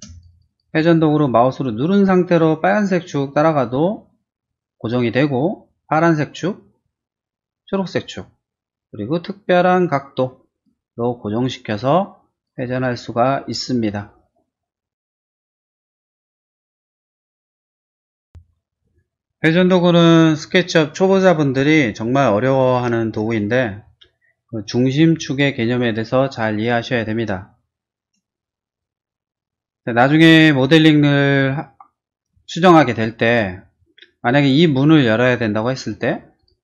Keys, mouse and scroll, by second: 0.1 click, 0.3 click, 0.4 click, 0.7 q, 1.9-10.6 drag, 11.3 middle click, 12.3 click, 15.1 space, 15.4 middle click, 17.9 click, 18.3 Delete, 18.8 click, 28.7 click, 29.4 scroll down 1, 29.7 middle click, 30.5-31.0 scroll down 2, 31.8 middle click, 32.5 shift+middle click, 33.1 shift+middle click, 33.2 shift+middle click, 34.2 middle click, 34.6 middle click, 35.1 middle click, 35.7 click, 35.9 click, 36.4 click.